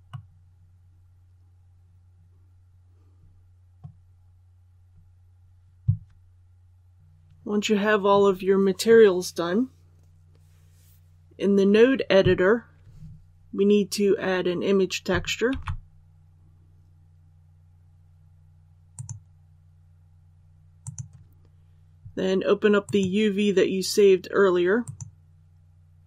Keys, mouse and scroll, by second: 0.0-3.7 middle drag, 4.1-6.9 scroll down 1, 6.9 middle click, 15.4 shift+a, 18.9 click.